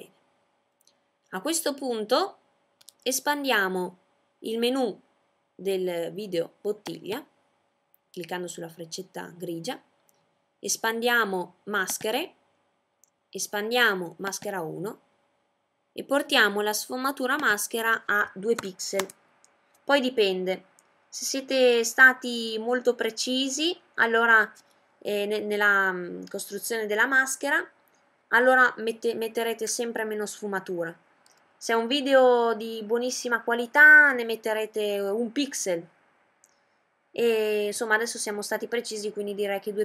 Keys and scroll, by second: 17.1 2.